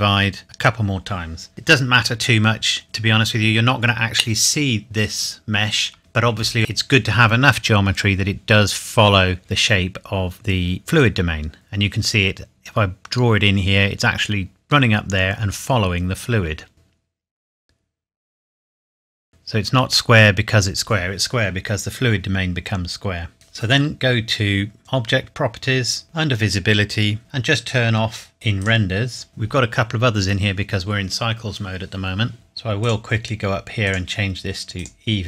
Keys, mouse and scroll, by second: 5.9 Tab, 11.0 click, 24.8 click, 27.2 click, 28.6 click, 32.8 click.